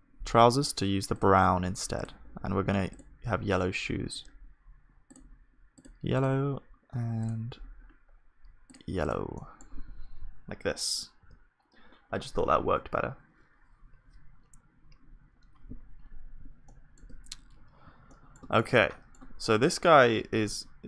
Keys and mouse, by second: 0.6 click, 5.9-11.0 drag, 9.4-14.0 middle drag, 10.8 KP_1, 11.2 ctrl+s, 18.1-20.6 middle drag, 20.6 KP_1.